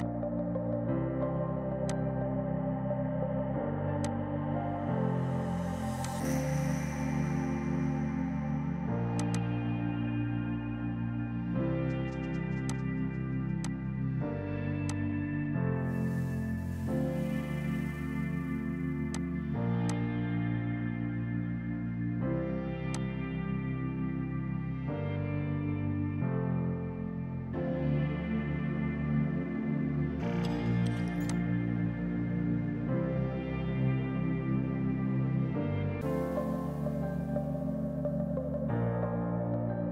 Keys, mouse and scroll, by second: 0.1 click, 2.6 space, 4.1 click, 9.2 click, 10.1 KP_5, 10.2 KP_0, 10.4 KP_Enter, 11.5 space, 12.7 click, 14.5 right click, 14.9 click, 19.2 click, 19.5 right click, 21.6 right click, 23.0 click, 26.6 ctrl+s, 31.3 click.